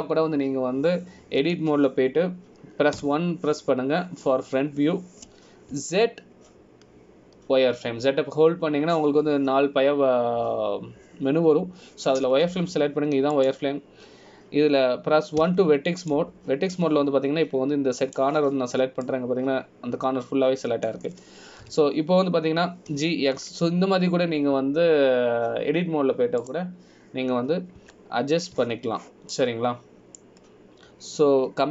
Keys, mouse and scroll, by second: 3.6 Tab, 5.1 KP_1, 7.9 z, 14.7 scroll up 2, 15.5 click, 15.5 scroll up 1, 17.6 1, 18.2 click, 18.9 click, 21.0 scroll down 1, 21.2 middle click, 23.8 KP_1, 25.1 g, 30.0 Tab, 30.7 z, 31.5 middle click.